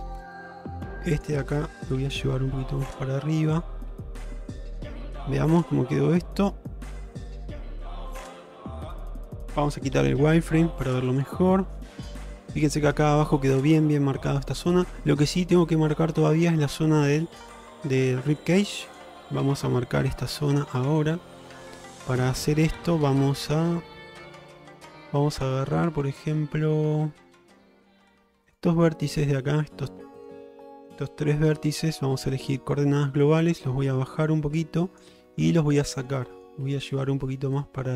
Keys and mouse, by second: 0.4 shift+middle click, 1.2 click, 2.1 g, 5.2 Tab, 6.4 ctrl+Tab, 9.0 shift+middle drag, 10.0 q, 11.7 shift+middle drag, 12.0-12.4 middle drag, 14.3 middle click, 19.0 click, 19.5 Tab, 20.6 click, 21.0 middle click, 22.1 shift+middle drag, 22.5-24.3 middle drag, 24.7 middle click, 28.5 shift+click, 29.2 shift+click, 29.6-30.3 middle drag, 33.3-35.1 drag, 35.2 middle click, 36.3 shift+middle click, 37.6-37.9 drag.